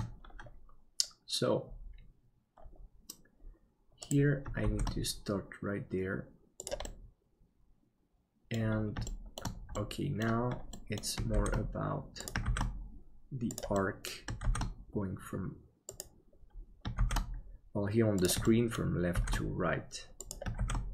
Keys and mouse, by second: 4.7 shift+d, 7.7 middle click, 9.2 shift+middle click, 9.8 middle click, 10.8 middle click, 11.4 shift+d, 13.8 middle click, 18.5 shift+middle click.